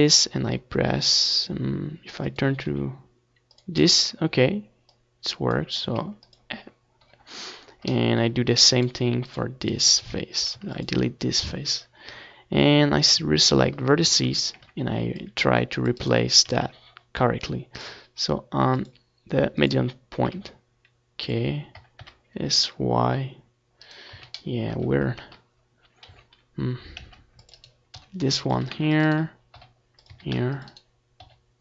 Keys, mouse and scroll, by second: 1.3-4.0 right drag, 1.6 s, 4.0 middle click, 4.9 click, 5.2 right click, 5.5 s, 5.7-6.8 middle drag, 6.8 right click, 7.2-8.5 drag, 7.2 r, 9.4 right click, 9.7 z, 10.7-26.0 typing, 13.2 right click, 14.0-17.2 middle drag, 17.4 right click, 17.8 click, 19.0 click, 19.9 click, 21.1 right click, 21.1 middle click, 21.6 click, 22.1-26.0 middle drag, 26.0 click, 26.6 middle click, 26.9 right click, 27.6-29.6 middle drag, 27.6 a, 28.1 c, 29.1 g, 29.6 right click, 30.0 middle click, 30.1 click, 30.1 right click, 30.3 ctrl+s, 30.6 Tab, 31.2 z.